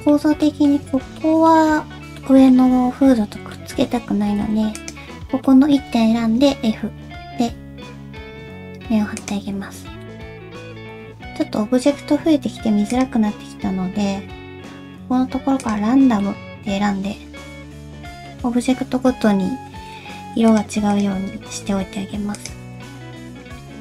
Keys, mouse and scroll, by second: 0.4 middle click, 1.2 middle click, 2.2 middle click, 3.1 alt+z, 3.5 middle click, 4.1 alt+z, 4.7 click, 5.4 middle click, 6.5 f, 9.6-10.6 scroll down 3, 10.0 middle click, 16.2 middle click, 18.5-19.3 scroll up 2, 19.6 g, 20.9 click, 21.4 g, 22.7 middle click.